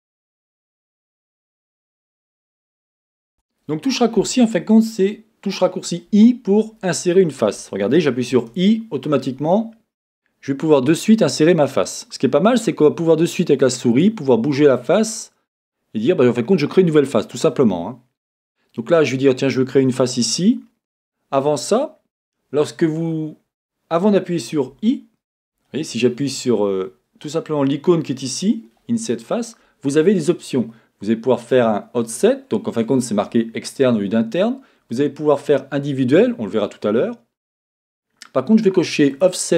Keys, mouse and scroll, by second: 0.8-4.4 middle drag, 2.6-3.3 scroll up 2, 3.3 scroll up 1, 3.3 Tab, 4.4-8.3 drag, 24.8 Escape, 39.1-39.5 drag.